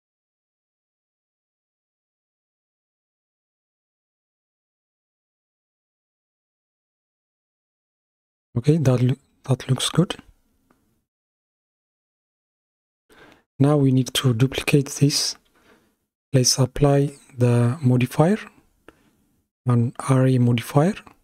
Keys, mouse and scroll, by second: 5.4-7.4 middle drag, 7.4-7.8 scroll up 3, 8.8-13.1 shift+middle drag, 18.0 click.